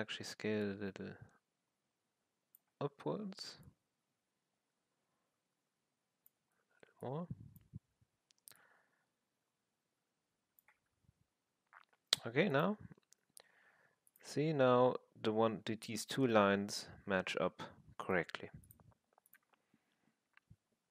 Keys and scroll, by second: 0.0 r, 2.7 w, 6.4 r, 7.6 w, 10.7 r, 11.8 w.